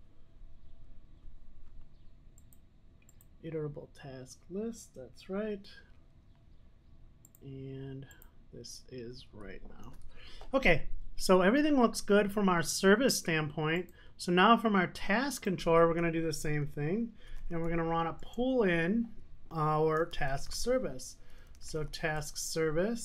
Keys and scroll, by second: 10.0 super+s, 15.9 Tab, 21.6 Return, 22.3 Return.